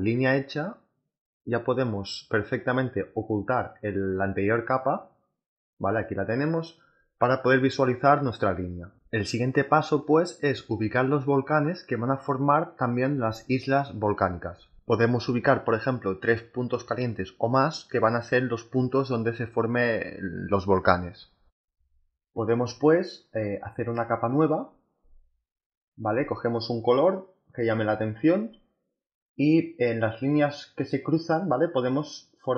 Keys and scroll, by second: 5.1 space.